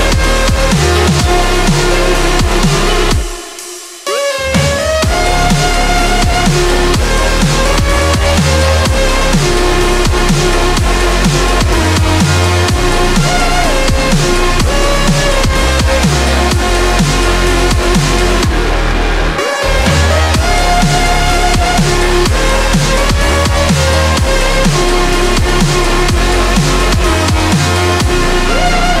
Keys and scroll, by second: 7.1 scroll down 1, 17.3 ctrl+z, 21.7-22.8 scroll up 1, 23.3 ctrl+z, 25.8-29.0 scroll down 1.